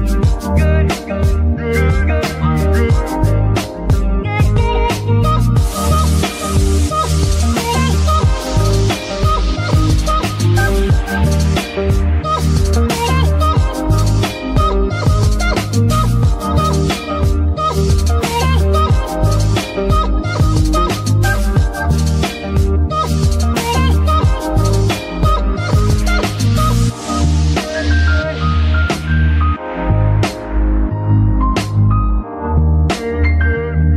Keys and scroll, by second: 20.6 space, 24.0 ctrl+Tab, 24.5 ctrl+Tab.